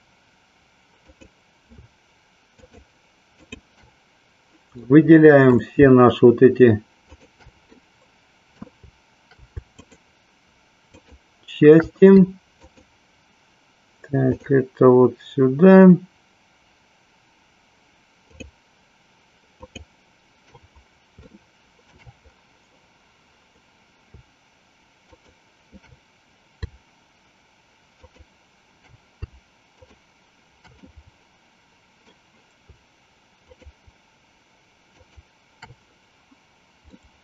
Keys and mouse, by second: 1.0 click, 2.5 shift+click, 3.5 shift+click, 5.0 middle click, 7.0 shift+click, 7.9-9.5 middle drag, 9.9 shift+click, 11.1 shift+click, 12.5 shift+click, 14.3 shift+click, 19.5 shift+click, 21.4 shift+middle click, 25.1 shift+click, 29.6 shift+click, 31.0-32.4 middle drag, 33.4 shift+click, 34.9 shift+click, 37.0-37.2 middle drag.